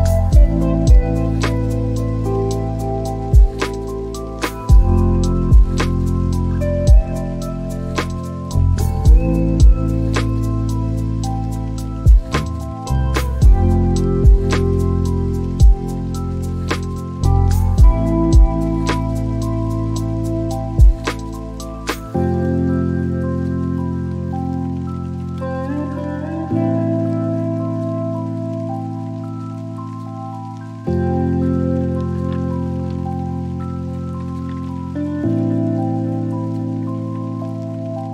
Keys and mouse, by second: 6.2 `, 8.0 click, 16.7 g, 19.0 z, 21.8 click, 22.8 click, 26.7 x, 32.6 shift+click, 36.0 z.